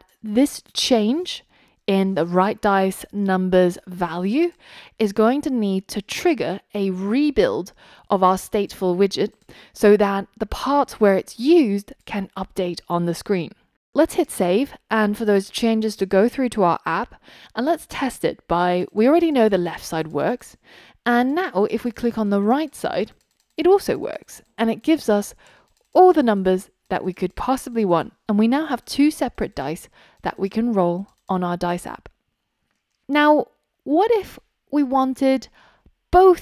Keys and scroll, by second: 1.6 super+x, 3.2 super+v.